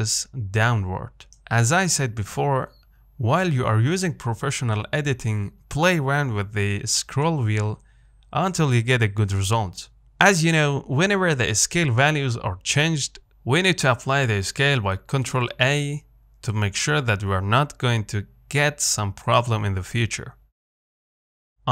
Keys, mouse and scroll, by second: 3.7-5.8 middle drag, 5.8-6.3 scroll down 3, 6.3 Tab, 6.6-7.9 middle drag, 7.9 scroll up 1, 8.1-9.2 shift+middle drag, 9.5-17.3 middle drag, 17.3 ctrl+a.